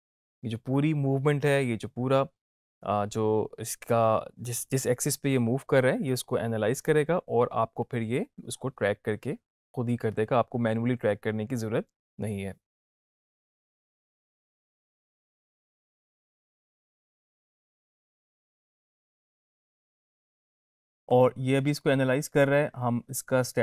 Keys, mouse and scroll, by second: 20.2 click.